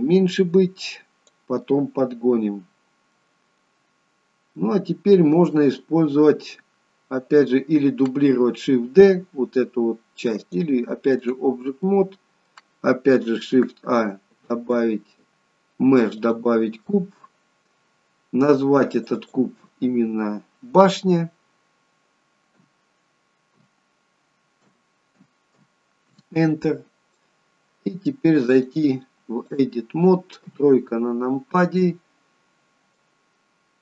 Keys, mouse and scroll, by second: 1.7 middle click, 4.1-4.7 scroll up 1, 4.7 middle click, 10.5 click, 11.8 middle click, 16.9 middle click, 19.0 click, 19.2 click, 28.6 click, 30.5 KP_3, 33.0 click.